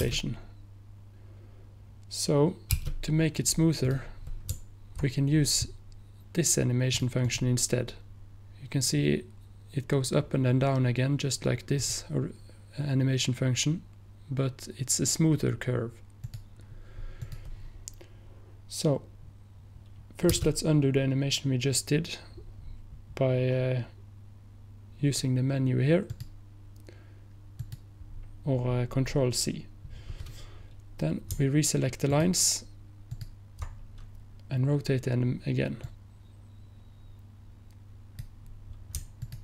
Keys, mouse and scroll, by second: 3.9 click, 7.0 click, 9.3 click, 11.9 click, 13.8 click, 26.2 click, 32.2 ctrl+click, 35.9-39.1 drag, 39.3 ctrl+click.